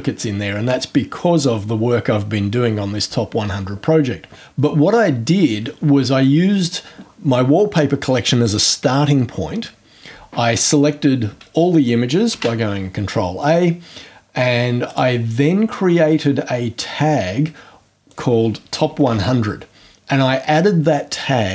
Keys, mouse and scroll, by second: 4.9 click, 11.8 click, 12.3 ctrl+a, 14.9 click, 16.0 scroll down 2, 16.4 scroll up 2, 18.1 click, 18.6-19.6 typing.